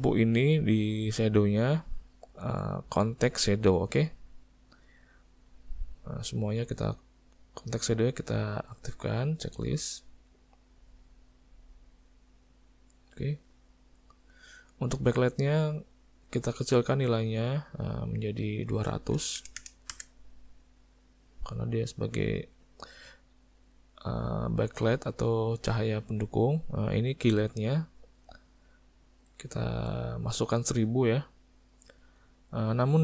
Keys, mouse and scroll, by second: 1.6 click, 4.0 click, 5.6 click, 7.7 click, 8.4 shift+middle click, 8.8 middle click, 9.7 click, 11.3 click, 14.1 click, 14.9 middle click, 15.7 click, 16.8 click, 18.2 click, 19.6 KP_0, 20.5 middle click, 21.3 click, 22.5 click, 27.3 click, 28.2 click, 29.4 click, 31.7 click, 32.9 middle click.